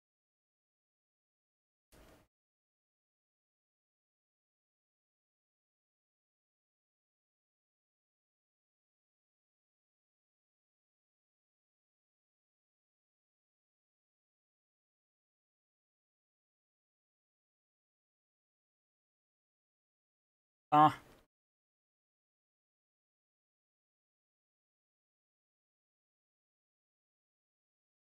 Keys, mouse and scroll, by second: 0.0-1.0 typing, 3.3 typing, 9.3-10.4 typing, 13.3-16.0 typing, 21.1-28.0 typing.